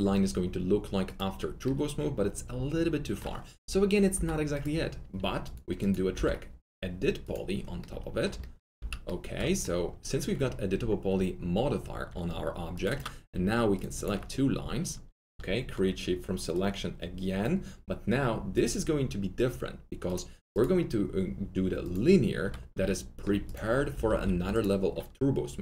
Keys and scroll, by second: 4.1 alt+Delete, 8.7 alt+z, 12.0 z, 23.8-24.7 typing.